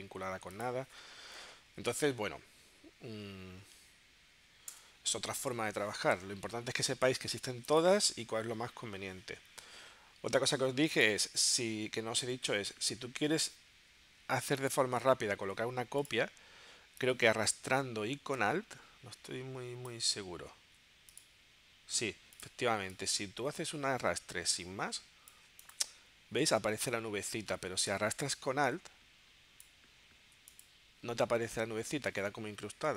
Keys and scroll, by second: 4.8 BackSpace.